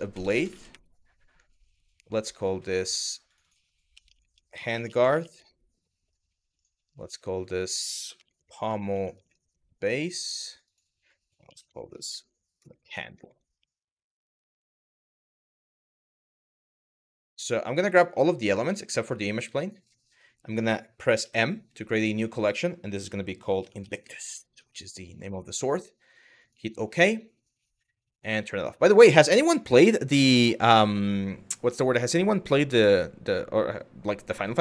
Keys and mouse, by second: 0.0 BackSpace, 2.0 click, 2.9 click, 3.2-5.1 drag, 6.2 click, 7.1-9.2 drag, 8.3 m, 10.1 click, 10.3-14.1 drag, 11.7 m, 12.4 BackSpace, 12.5 BackSpace, 15.4 click, 15.5-16.6 drag, 17.7 drag, 18.6 ctrl+click, 19.2 ctrl+drag, 20.8 m, 27.7 click, 28.2 click.